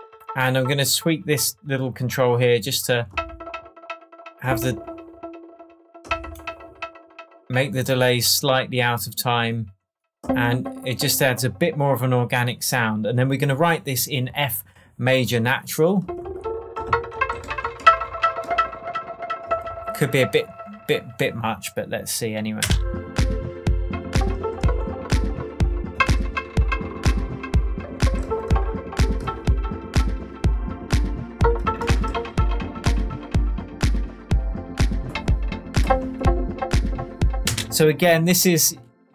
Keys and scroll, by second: 22.6 space, 37.4 space.